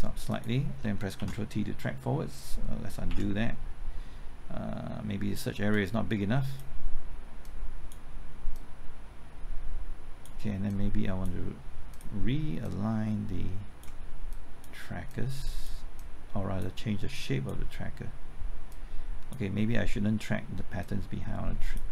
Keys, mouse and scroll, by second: 0.3 click, 1.1 ctrl+t, 3.1 ctrl+z, 5.7-21.9 drag.